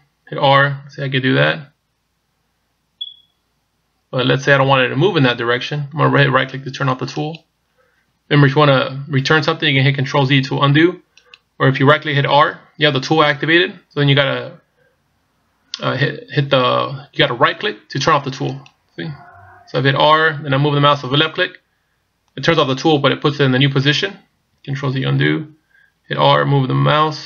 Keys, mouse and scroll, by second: 0.6 r, 11.3 right click, 12.5 r, 19.9 r, 25.1 ctrl+z, 26.1 r.